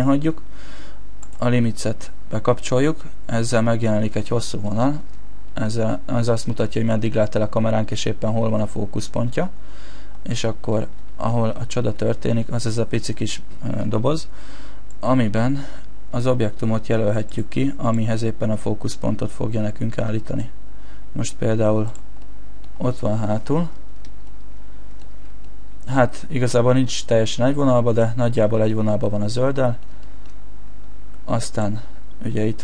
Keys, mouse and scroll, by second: 1.2 click, 3.0 middle click, 6.6 shift+middle click, 7.7-8.6 scroll down 3, 8.6 shift+middle click, 9.7-10.6 scroll up 3, 10.7 shift+middle click, 11.2-11.5 scroll up 1, 11.5 middle click, 14.9 click, 17.9 click, 22.2 middle click, 22.8-24.3 scroll down 4, 24.3 shift+middle click, 25.5 middle click, 26.1 shift+middle click, 29.4 middle click, 30.0 shift+middle click, 30.3-31.5 scroll up 1, 31.5 click, 31.5-32.1 scroll up 1.